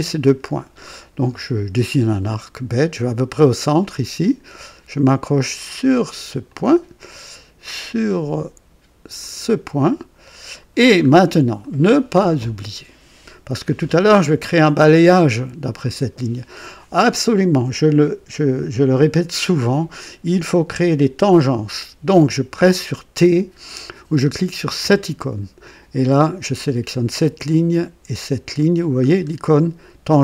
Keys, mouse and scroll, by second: 1.8 click, 3.7 click, 6.4 click, 9.1 click, 10.3 right click, 11.0 scroll up 2, 11.6 right click, 13.5-13.9 scroll down 2, 24.7 t, 26.8 click, 28.0 click, 29.0 scroll up 1.